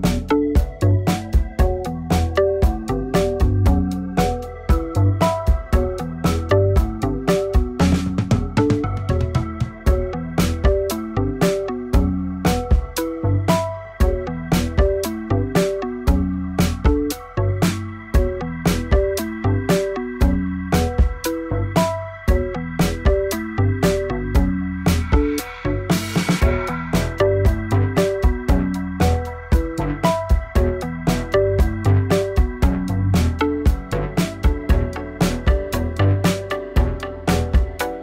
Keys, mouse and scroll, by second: 0.7 click, 2.5 click, 4.0 click, 5.6 click, 7.9 click, 9.5 click, 10.6 ctrl+r, 10.9 click, 11.4 g, 12.6 shift+click, 14.0 shift+click, 15.4-16.8 scroll down 1, 16.8-17.2 scroll down 2, 17.2 shift+middle click, 17.7 scroll down 2, 17.9 shift+middle click, 18.2-18.8 scroll up 2, 18.9 shift+middle click, 19.3-19.7 scroll up 1, 19.7 shift+middle click, 19.9 scroll down 2, 20.3 shift+middle click, 20.6-21.1 scroll up 1, 21.1 shift+middle click, 21.3-21.9 scroll up 2, 21.9 shift+middle click, 22.1-22.5 scroll up 2, 22.5 k.